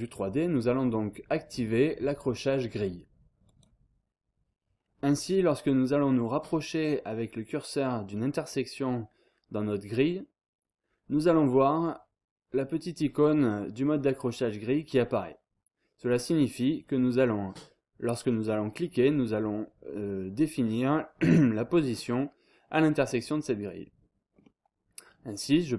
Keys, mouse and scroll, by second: 3.4 click, 4.8-5.4 scroll up 2, 5.9-6.5 scroll up 2, 22.9-23.3 scroll down 2, 23.3-24.0 scroll up 2, 24.3 scroll down 2, 24.5-25.1 scroll up 2.